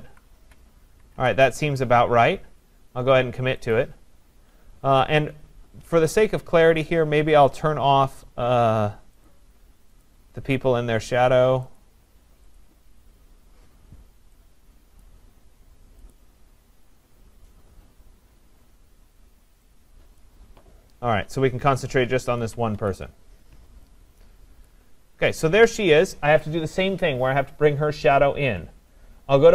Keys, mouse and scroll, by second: 0.4 scroll down 1, 3.7-8.8 drag, 3.7 scroll up 1, 8.7 scroll up 1, 10.0 click, 11.8 click, 12.6 click, 15.1 click, 16.1 click, 22.4 ctrl+=, 22.8 ctrl+=, 23.5 scroll, 24.3-26.9 scroll, 24.7 click.